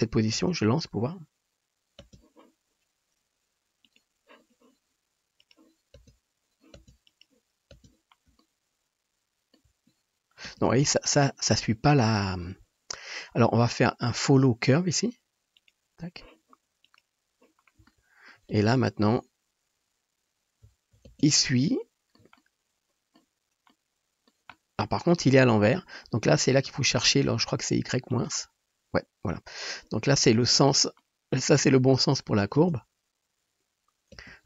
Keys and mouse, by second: 0.5 space, 2.3 space, 3.9 middle click, 5.5-6.1 middle drag, 6.1 space, 7.0 space, 7.9 space, 10.6 space, 15.7-17.0 drag, 18.6 space, 21.5 space, 21.9-32.4 shift+middle drag, 32.7 space, 34.3 space.